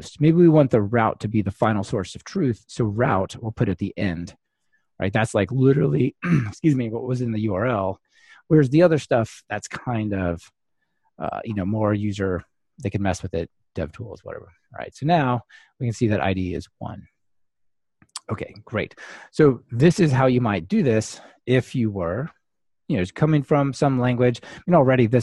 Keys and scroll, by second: 3.1 super+x, 4.1 super+x, 8.1 super+v, 14.4 ctrl+r.